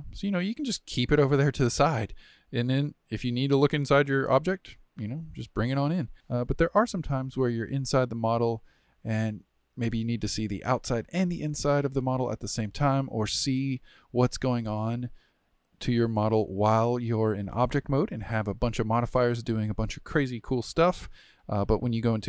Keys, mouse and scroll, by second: 0.8-1.2 scroll down 4, 1.2-3.0 shift+middle drag, 3.0 g, 4.3-6.1 middle drag, 6.1-7.1 scroll down 4, 7.1-7.8 scroll up 11, 7.8-9.7 middle drag, 9.7-11.0 scroll down 6, 11.0-11.8 middle drag, 11.8-12.2 scroll down 2, 12.2-17.2 shift+middle drag, 18.4-18.8 scroll down 2, 18.8-19.4 shift+middle drag, 19.4-19.7 scroll down 1, 19.7-21.8 shift+middle drag, 21.8 Tab, 22.2 click.